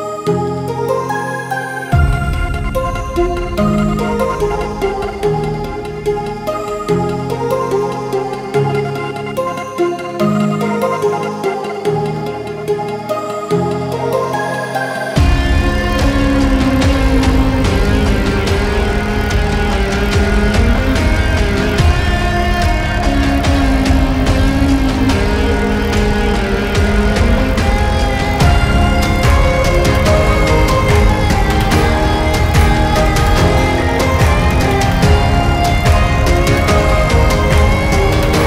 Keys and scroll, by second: 0.0 ctrl+z, 11.5 ctrl+z, 11.8 ctrl+z, 12.2 ctrl+z.